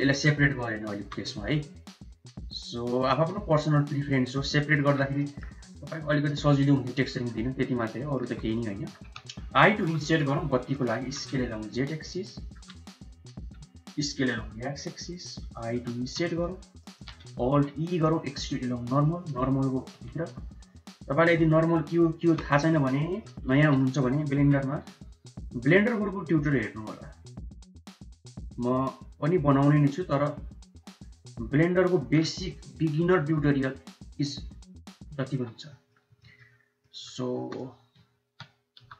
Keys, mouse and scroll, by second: 1.0 alt+s, 4.1 click, 4.6 Tab, 4.6 right click, 6.3-7.1 middle drag, 7.5 Tab, 7.8 middle click, 8.1 3, 8.5 middle click, 9.7 i, 10.9 s, 12.2 shift+click, 14.0 s, 17.3 alt+e, 20.1 3, 22.4 shift+middle click, 23.4 middle click, 24.2 alt+e, 32.4 Tab, 33.0 middle click, 35.2 Tab, 35.4 middle click, 36.7 middle click, 37.2 3, 38.7 i.